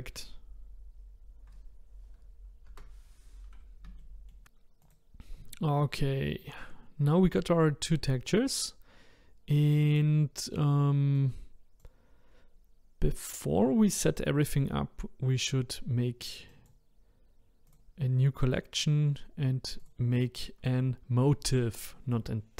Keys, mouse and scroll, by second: 1.7-2.7 scroll down 1, 2.7 KP_0, 3.4-4.0 scroll down 1, 4.0-4.4 shift+middle drag, 4.4 Delete, 4.9 click, 5.8-6.4 scroll down 1, 6.4-9.5 shift+middle drag, 11.2-14.2 drag, 16.5-17.7 drag, 19.8 click.